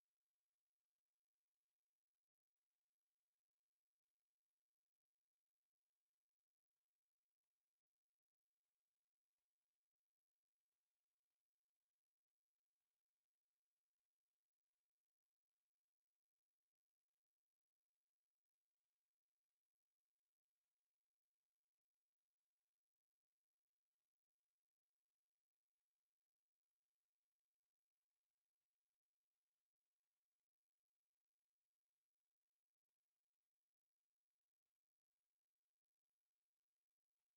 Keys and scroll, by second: 1.5 s, 2.8 F8, 3.4 space, 3.6 3, 3.8 Return, 4.3 Escape, 6.2 t, 6.3 space, 6.8 Escape, 10.5 c, 10.9 space, 11.8 Escape, 12.2 m, 12.3 space, 14.9 Escape, 15.4 e, 15.5 space, 15.9 m, 18.2 Escape, 19.4 e, 19.5 space, 19.7 c, 20.0 space, 21.0 Escape, 21.3 r, 21.5 space, 22.1 F8, 22.7 m, 22.8 space, 24.1 Escape, 37.2-37.3 typing.